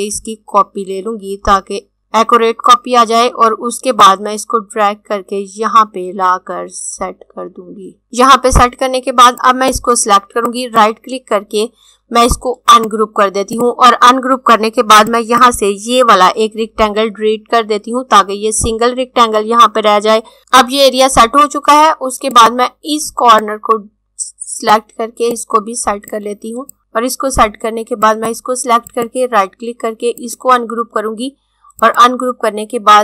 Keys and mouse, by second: 3.9 click, 9.3 click, 10.4 right click, 12.6 click, 16.6 Delete, 20.4 z, 22.3 click, 28.8 right click, 30.0 click.